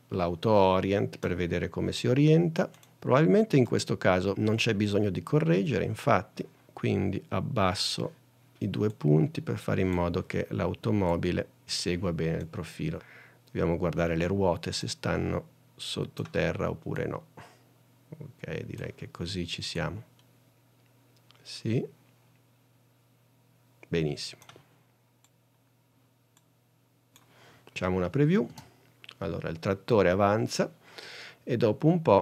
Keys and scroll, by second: 28.6 space.